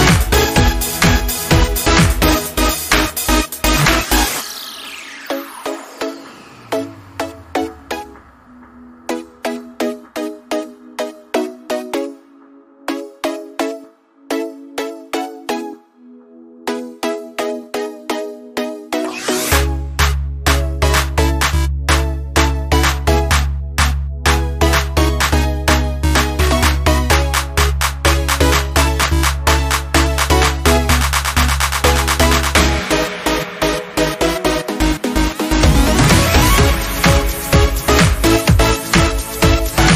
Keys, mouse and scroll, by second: 1.9 scroll up 1, 2.7 scroll down 1, 6.3 click, 11.8 click, 13.4 space, 13.5 click, 13.8 space, 16.6 click, 19.7 scroll up 1, 21.1 space, 21.6 click, 21.7 space, 23.9-28.4 drag, 31.0 click, 35.4 ctrl+c, 36.7 click.